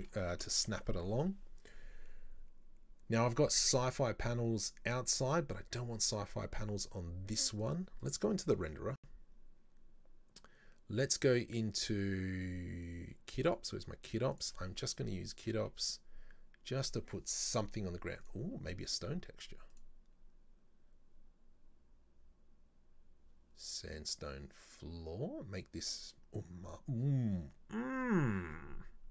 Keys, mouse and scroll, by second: 0.3 scroll up 2, 0.6-0.9 shift+middle drag, 1.0-1.3 scroll up 2, 7.7 click, 8.5 click, 11.1 click, 13.5 click, 14.3-17.5 drag, 19.7-22.9 drag.